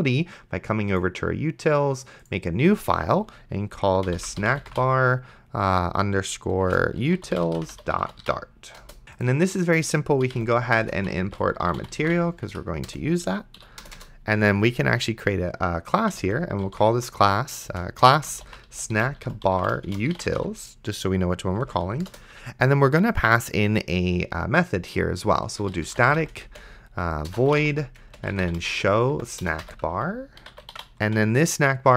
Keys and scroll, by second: 3.8-5.5 typing, 6.7-8.7 typing, 8.8 Return, 10.3-12.8 typing, 12.9 Return, 13.6 End, 13.8 Return, 15.9-21.6 typing, 22.1 Return, 25.2-31.3 typing.